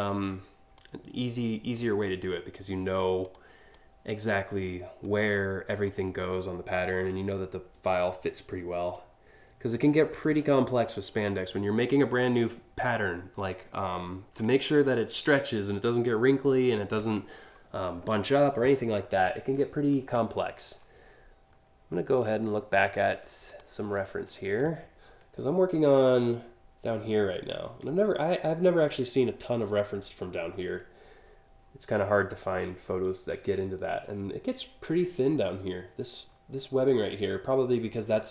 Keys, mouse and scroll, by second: 0.3-1.3 drag, 2.9 click, 3.4-4.7 drag, 5.5-6.7 drag, 8.6-10.3 drag, 21.8 click, 23.1 click.